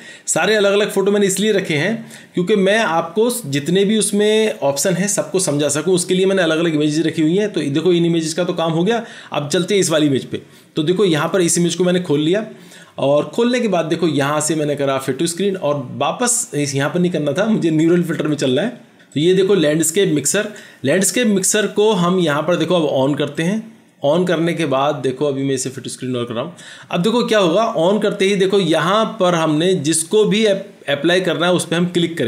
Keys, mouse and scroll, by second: 11.2 double click.